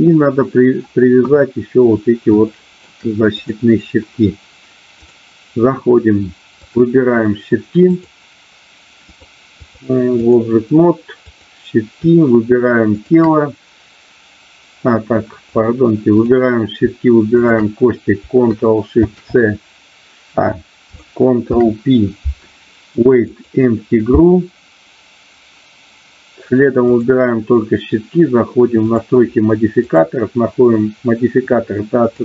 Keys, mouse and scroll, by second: 1.1 KP_1, 2.5 shift+middle click, 3.3 click, 5.0 click, 6.6 click, 7.9 click, 9.0 click, 9.6 click, 11.3 click, 12.9 shift+click, 15.5 click, 19.0 ctrl+shift+c, 21.4 ctrl+p, 26.9 click, 28.9 click, 29.8-32.2 drag.